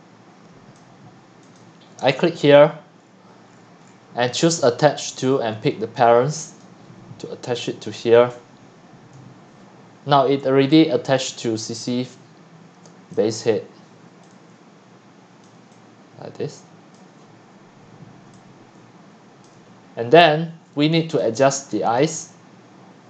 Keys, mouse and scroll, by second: 1.6-2.0 scroll, 2.1-2.6 scroll, 3.0-4.6 scroll, 5.3 click, 9.7-10.6 drag, 10.6-13.3 typing, 11.9 click, 13.2 click, 15.4 click, 15.6-16.9 c, 17.0 click, 17.2 c, 17.4 scroll, 17.5 scroll, 17.6 scroll, 17.9 scroll, 18.0 scroll, 18.1 scroll, 18.3-19.4 typing, 19.6-20.8 middle drag, 19.6-20.3 scroll, 20.6 scroll, 21.2-23.0 drag.